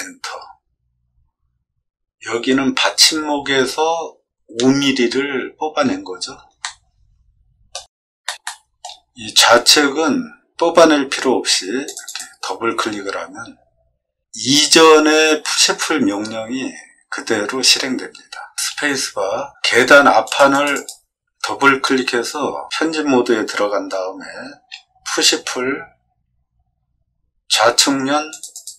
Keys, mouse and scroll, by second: 6.6-7.7 middle drag, 8.2 shift+middle click, 8.4 middle click, 9.0 scroll up 6, 9.3 middle click, 11.8 click, 18.6 space, 20.2 click, 20.5 click, 20.8 click, 25.4 p, 28.2 click, 28.5 click.